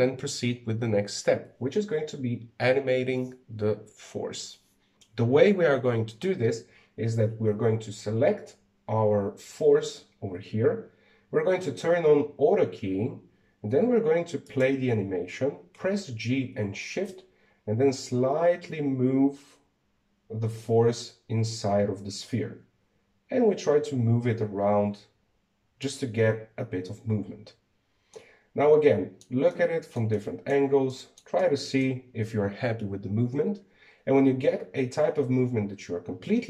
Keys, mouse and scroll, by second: 15.2 click, 16.5 g, 28.9-35.2 middle drag.